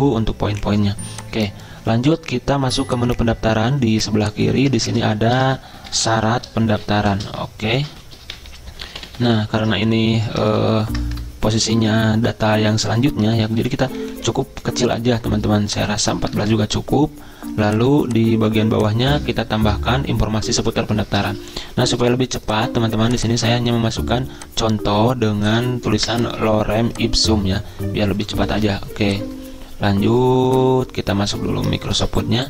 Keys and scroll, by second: 4.8 ctrl+a, 5.5-10.0 typing, 10.0 ctrl+a, 10.5 ctrl+Left, 10.6 ctrl+Left, 11.6 ctrl+a, 13.5 ctrl+[, 13.6 ctrl+[, 13.8 ctrl+[, 13.9 ctrl+[, 16.1 typing, 16.4 Return, 19.6 Return, 22.0 super+m, 28.5 ctrl+c, 31.9 ctrl+v.